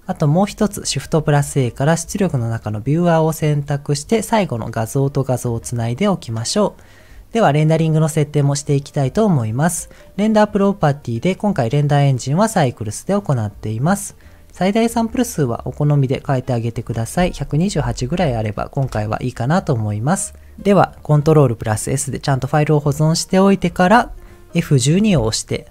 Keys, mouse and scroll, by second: 0.7 shift+a, 4.6-5.8 drag, 10.0-11.1 drag, 16.7-21.3 drag, 21.3 ctrl+s.